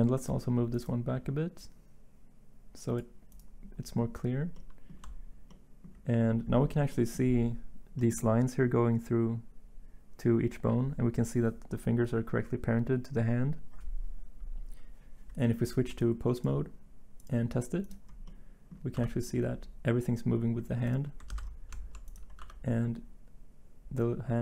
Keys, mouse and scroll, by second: 18.9 r, 21.3 ctrl+z, 22.4 r.